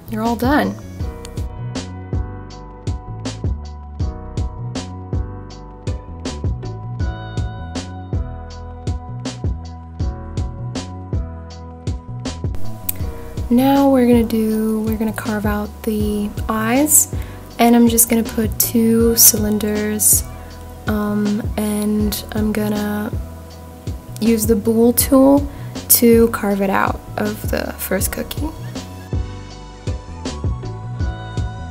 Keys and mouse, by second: 0.8 click, 1.9 click, 2.6 ctrl+a, 3.0-4.4 right drag, 5.1 g, 5.2 z, 6.6 click, 7.0 click, 7.3-8.1 middle drag, 8.6-10.3 middle drag, 11.1 click, 11.9 shift+s, 12.9 shift+a, 14.9 click, 16.6-18.5 drag, 20.5 click, 21.3 s, 22.7 click, 24.0 click, 25.6 g, 25.7 x, 27.5 click, 27.8 s, 29.8 click, 31.3-31.7 middle drag.